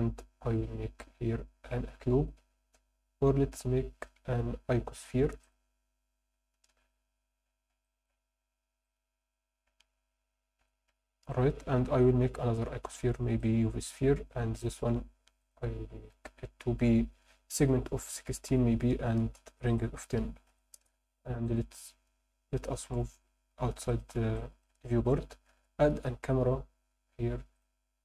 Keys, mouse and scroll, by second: 0.1 shift+a, 6.7 KP_1, 7.8 alt+shift+middle click, 8.4 g, 8.9 click, 9.9 ctrl+z, 10.6 g, 10.9 z, 11.3 click, 12.1 shift+a, 14.6 click, 15.4-19.2 drag, 19.7-20.8 drag, 21.4 click, 22.9 g, 23.9 click, 24.4 alt+shift+middle drag, 24.9 ctrl+middle click, 25.5 shift+a.